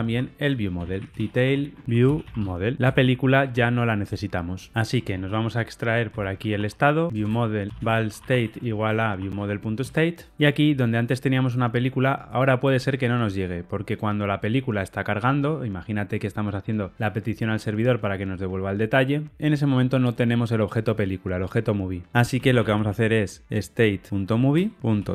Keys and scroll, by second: 2.7 alt+shift+Right, 9.7 Return, 24.4 Return.